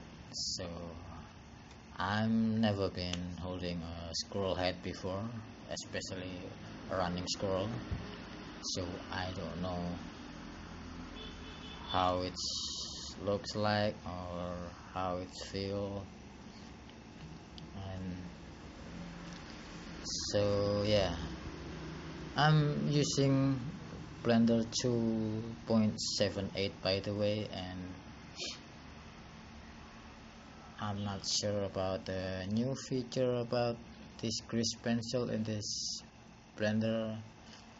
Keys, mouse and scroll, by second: 5.7 click, 12.3 click, 23.3 click, 25.4 click.